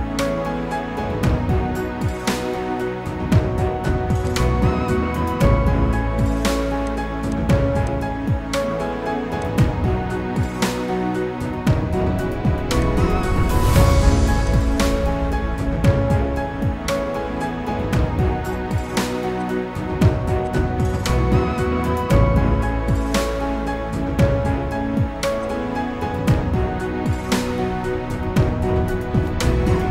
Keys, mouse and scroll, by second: 7.3 double click, 15.5 typing, 15.7 Return, 19.1 ctrl+t, 20.0 ctrl+t, 22.7 alt+scroll down 1, 27.0 ctrl+s, 29.7-29.9 scroll down 1.